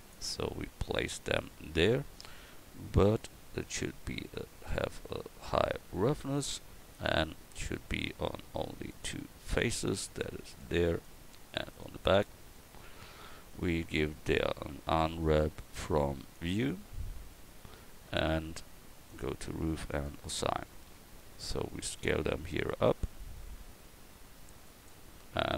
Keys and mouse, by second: 3.6-6.8 drag, 6.8 Tab, 13.2 KP_1, 14.9 u, 20.1-25.1 drag, 25.3 Tab.